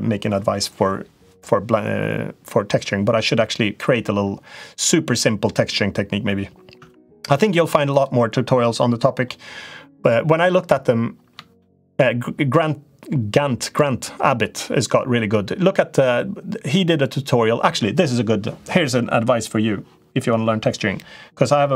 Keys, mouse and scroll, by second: 6.7 Tab, 11.3 shift+middle click.